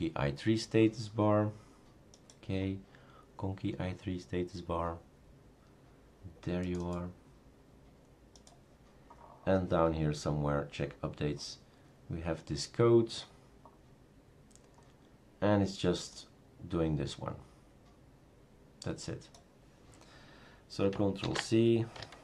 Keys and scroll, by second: 21.2 ctrl+c.